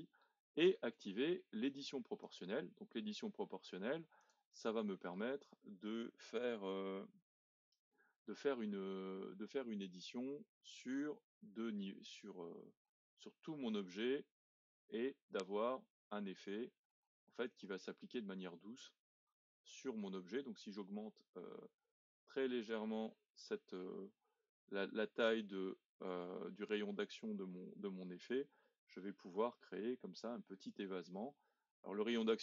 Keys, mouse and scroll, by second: 0.4-2.2 scroll up 1, 2.2 click, 4.2-7.4 drag, 10.6 click.